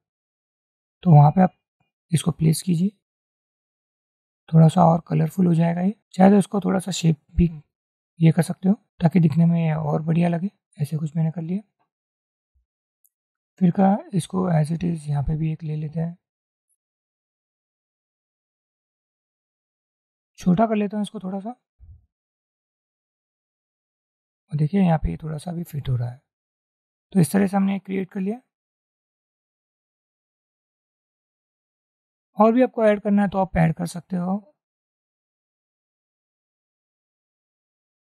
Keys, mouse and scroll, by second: 1.5-3.5 drag, 4.1 click, 5.3-6.3 drag, 6.9-8.3 drag, 13.3-14.9 alt+drag, 15.3-16.6 alt+drag, 18.7 click, 20.0 shift+click, 22.7-25.4 shift+drag, 32.6-33.9 drag.